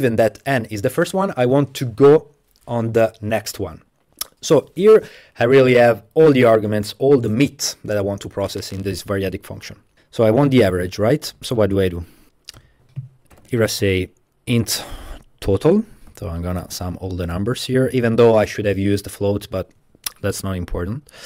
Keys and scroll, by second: 10.2 Home, 10.6 Up, 11.4 Up, 11.5 Up, 11.7 Up, 11.8 Up, 12.0 Up, 12.2 Up, 12.6-13.9 typing, 15.4-17.4 typing, 19.3 Page_Down, 19.8 Page_Down.